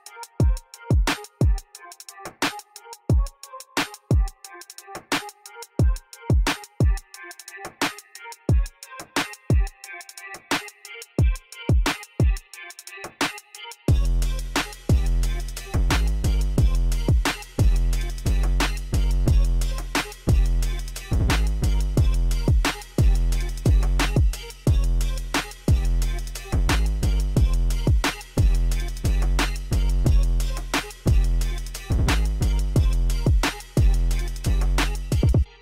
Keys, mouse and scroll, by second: 4.3 click, 5.9 click, 7.0 KP_1, 7.2 KP_0, 7.3 KP_8, 7.6 KP_0, 7.8 Return, 10.0 click, 11.3 click, 14.4 click, 20.3 click, 21.3 KP_0, 21.5 KP_8, 21.7 KP_0, 22.0 Return, 25.3 click.